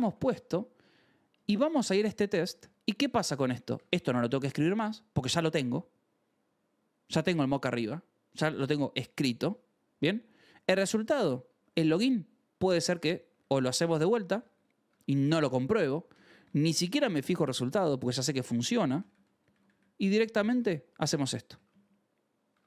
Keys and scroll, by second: 0.7 j, 2.3 k, 3.6 d, 5.0 Escape, 5.3 ctrl+s, 10.1 j, 10.7 l, 11.4 shift+v, 11.8 Escape, 12.4-14.3 typing, 15.0 Escape, 15.5 k, 15.8 ctrl+s, 16.1 j, 17.0 d, 17.4 Escape, 18.7-20.2 typing, 20.4 ctrl+s, 21.4-22.6 typing, 22.4 Escape.